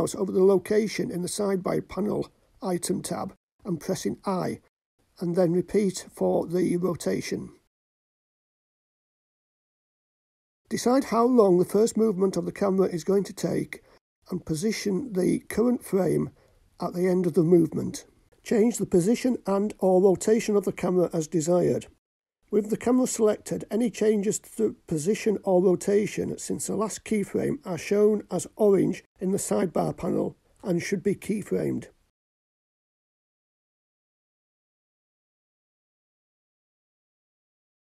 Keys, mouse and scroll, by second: 0.6 i, 10.5 click, 12.3-14.3 drag, 13.7 KP_0, 18.3 click, 19.1 middle click, 21.5 shift+middle click, 23.3-23.6 scroll up 3, 24.3 shift+middle drag, 25.3 shift+click, 27.0 click, 28.2 click, 29.6-30.2 scroll up 2, 31.3-31.9 scroll up 1, 31.9 click, 33.1 middle click, 36.5 click.